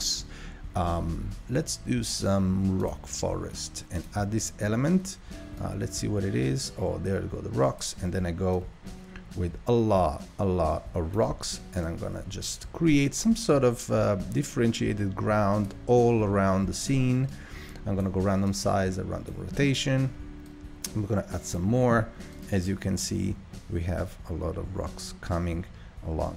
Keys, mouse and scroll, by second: 4.5-11.7 drag, 12.0-15.0 drag, 17.5-25.4 drag.